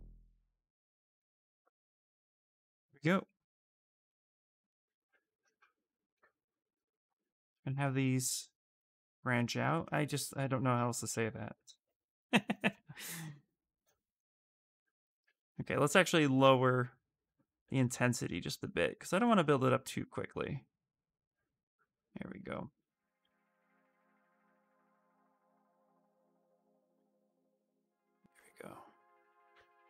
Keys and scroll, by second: 14.8 ctrl+z, 15.3 space.